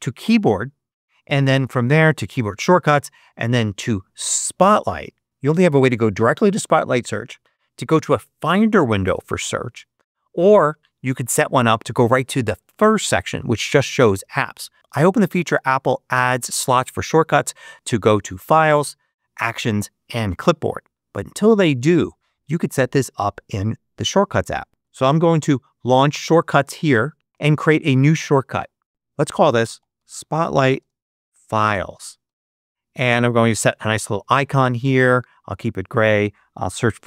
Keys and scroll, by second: 24.8 super+space, 24.8 super+s, 25.0 h, 25.8 Return, 28.9 super+BackSpace, 29.4 shift+super+BackSpace, 29.6-32.1 typing, 32.1 Return, 36.2-37.0 typing.